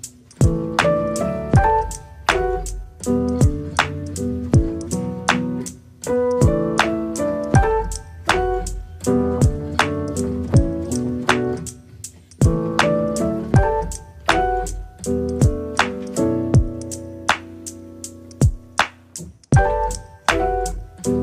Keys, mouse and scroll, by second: 0.2 middle click, 0.7 click, 1.5 KP_1, 1.9 click, 2.8 scroll up 1, 3.0 click, 3.6-4.6 middle drag, 4.6 click, 5.3 middle click, 6.0 KP_1, 6.9-8.4 shift+middle drag, 8.9 click, 9.3 click, 9.9 KP_0, 10.8 click, 12.0 scroll down 2, 12.6 click, 15.2 click, 16.1 click, 16.6-18.1 drag, 18.6-21.0 drag.